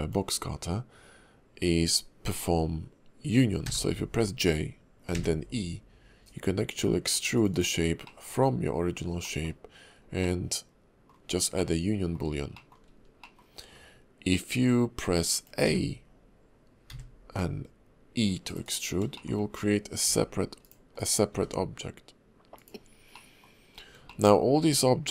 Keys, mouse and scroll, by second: 8.0 middle click, 8.9-9.2 scroll up 2, 9.2 middle click, 9.9-10.2 scroll down 2, 10.2 middle click, 11.2 scroll up 2, 11.5 middle click, 12.5 shift+middle click, 12.9-13.7 scroll down 2, 13.2 middle click, 13.7-14.3 scroll down 2, 14.3 click, 19.1 shift+middle click, 19.4-20.0 scroll up 1, 20.0 g, 20.9 click, 21.3 g, 22.8 scroll down 3, 23.1 middle click, 23.5-24.0 scroll up 2, 24.1 shift+middle click, 24.6 click.